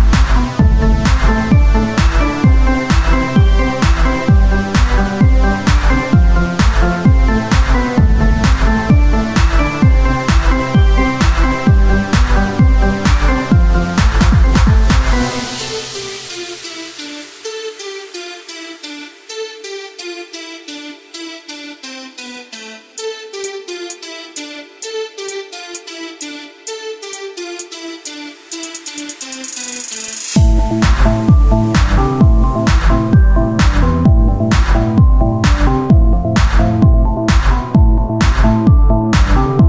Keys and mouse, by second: 9.4 middle click, 10.2 Tab, 15.3 click, 21.2 e, 25.3 f, 26.2 ctrl+z, 27.7 ctrl+Tab, 27.7 f, 29.0 ctrl+r, 32.6 Tab, 33.3 Tab, 35.4-36.6 drag, 39.0 Tab.